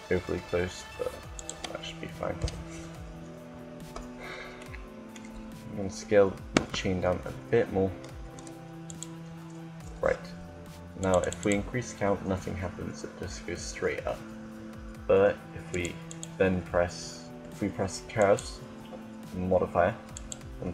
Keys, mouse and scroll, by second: 1.2-3.0 drag, 6.3 s, 10.6-12.9 drag, 12.9-15.3 middle drag, 15.4-17.7 drag, 19.9-20.7 drag.